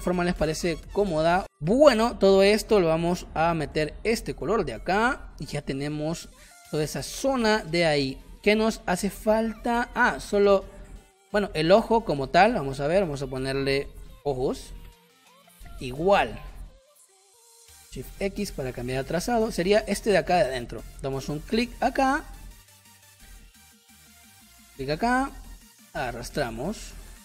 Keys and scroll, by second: 0.2 space, 1.5 space, 3.2 i, 4.5 v, 5.5 space, 9.6 space, 14.1 o, 14.2 j, 14.3 o, 14.4 s, 14.8 Return, 16.9 p, 18.1 shift+x, 18.5 space.